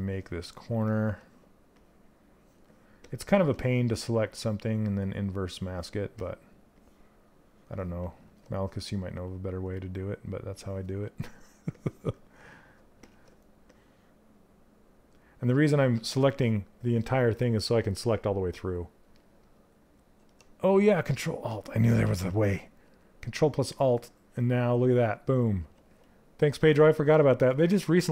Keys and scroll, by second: 25.1 ctrl+z.